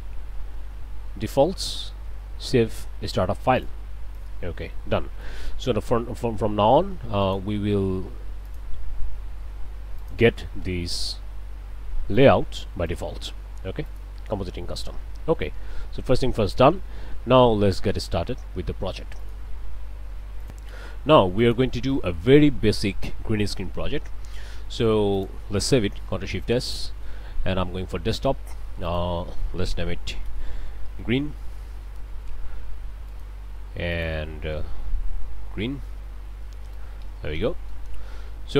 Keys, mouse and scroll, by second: 3.6 click, 4.1 click, 4.7 click, 7.2 click, 8.5 click, 10.0 click, 12.2 click, 12.9 click, 13.9 click, 19.2 click, 20.4 click, 21.5 click, 25.2 click, 26.1 ctrl+shift+s, 28.9 click, 30.2 shift+g, 30.4 shift+r, 30.7 shift+e, 31.0 shift+n, 31.7 Return, 33.1-33.4 scroll up 2, 33.9-34.2 scroll up 2, 34.7-36.7 typing, 37.3 Return.